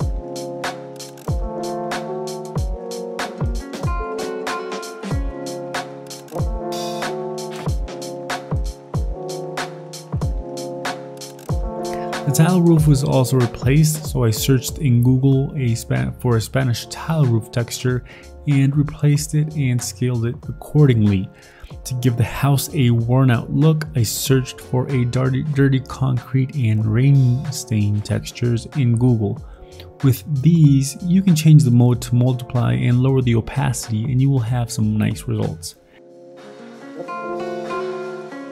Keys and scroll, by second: 0.0-1.9 typing, 2.0 ctrl+t, 2.9 ctrl+j, 3.0 ctrl+t, 3.9 i, 4.3 v, 6.4 ctrl+z, 7.8 ctrl+z, 7.8 ctrl+d, 8.2 ctrl+i, 8.5-12.7 typing, 13.1 alt+Tab, 13.3 ctrl+v, 13.4 ctrl+t, 13.6 ctrl+j, 14.2 v, 14.3 ctrl+t, 15.0 ctrl+t, 15.4-16.7 typing, 16.5 ctrl+shift+i, 16.6 Delete, 16.6 ctrl+d, 16.9 ctrl+t, 17.9 ctrl+t, 18.6 ctrl+t, 19.3 ctrl+t, 20.0 ctrl+t, 20.5 ctrl+t, 21.4-25.6 typing, 24.1 ctrl+z, 24.5 ctrl+z, 25.6 ctrl+z, 27.2 x, 27.2 ctrl+z, 27.4 ctrl+z, 30.2-33.1 typing, 32.0 alt+Tab, 33.0 ctrl+v, 33.1 Delete, 33.2 Delete, 33.2 ctrl+d, 33.4 ctrl+t, 33.8 ctrl+t, 36.0 Down, 36.3 Down, 36.5 Up, 36.7 Up, 38.0 Delete, 38.0 ctrl+t.